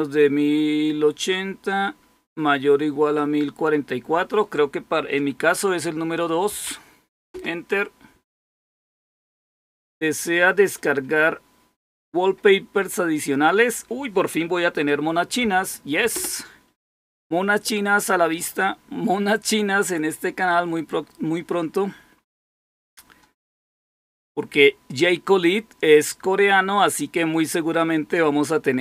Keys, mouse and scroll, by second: 6.4 2, 7.2 Return, 16.0 Return.